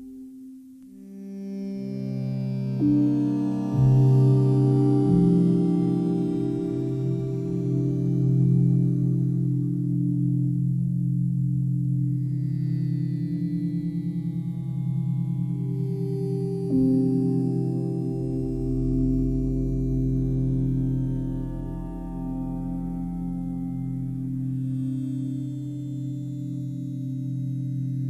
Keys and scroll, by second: 2.2 space, 9.4 space, 16.2 space, 19.0 ctrl+z.